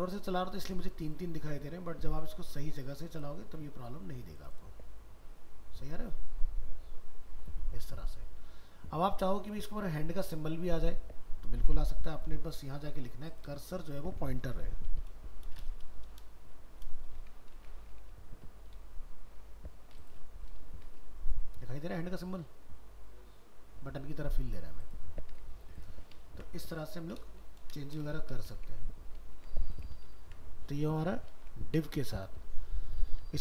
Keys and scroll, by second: 17.6 ctrl+s, 18.1 alt+Tab, 25.3 alt+Tab, 26.3 ctrl+s, 29.3 ctrl+w, 30.2 ctrl+s, 31.4 ctrl+w.